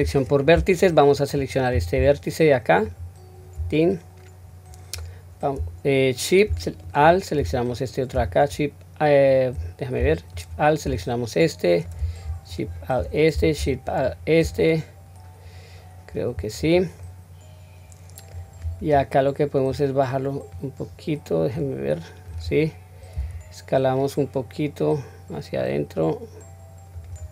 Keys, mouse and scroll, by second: 0.1 2, 0.4 middle click, 2.8 alt+click, 3.7-4.9 middle drag, 6.8 alt+shift+click, 7.6 middle click, 10.2 alt+shift+click, 11.0 middle click, 12.4 alt+shift+click, 13.8 alt+shift+click, 14.5-16.5 middle drag, 16.9-18.2 middle drag, 19.6-22.3 drag.